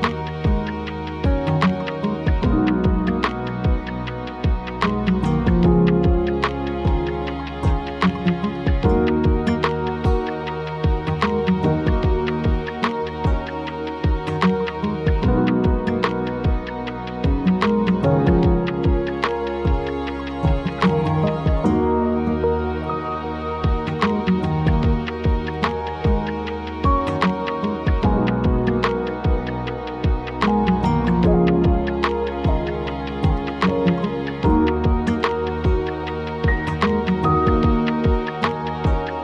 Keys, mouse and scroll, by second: 2.3-2.9 scroll up 3, 3.0-3.4 scroll down 1, 4.0 m, 5.2 click, 7.3 scroll down 2, 8.2-8.7 scroll up 2, 8.7 scroll down 1, 9.7 scroll down 1, 10.9 click, 12.9 click, 13.6 scroll up 1, 13.6 scroll down 4, 14.3-14.7 scroll up 4, 14.5 e, 15.1 click, 16.2-17.4 scroll down 2, 17.4 scroll down 2, 17.4 o, 18.1 click, 18.4-18.9 scroll down 4, 18.9-19.3 scroll up 3, 20.1-20.9 scroll, 22.0 scroll, 22.7 click, 22.9-23.6 scroll, 24.9 click, 25.8 e, 26.6 click, 27.7-28.6 scroll down 2, 28.6 scroll up 2, 29.7 middle click, 31.1-32.6 drag, 34.1-35.3 scroll down 3, 35.3 scroll down 1, 35.5-36.2 scroll up 2, 36.3 click, 37.2 click, 38.4 e, 39.1 click.